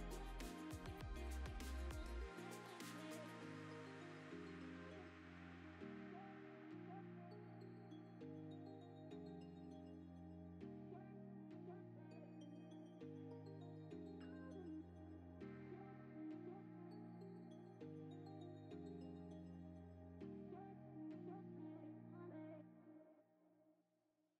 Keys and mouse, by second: 0.0 middle click, 0.4 Tab, 0.7 middle click, 0.8 3, 1.0 click, 1.5 click, 1.9 click, 2.1 Tab, 2.4 click, 3.9 middle click, 4.3 Tab, 4.6 click, 4.9 click, 5.4 shift+click, 5.7 click, 6.0 Tab, 6.3 KP_0, 7.2 click, 7.6 click, 9.0 click, 9.6 click, 11.0 click, 12.3 g, 12.4 z, 12.6 click, 13.3 click, 13.8 g, 13.9 shift+z, 14.9 shift+d, 15.0 shift+z, 17.4 middle click, 17.8 g, 17.9 shift+z, 18.5 click, 18.8 KP_0, 19.3 click, 20.0 click, 20.3 g, 20.4 z, 21.0 click, 21.8 click, 23.3 click, 23.7-24.3 typing.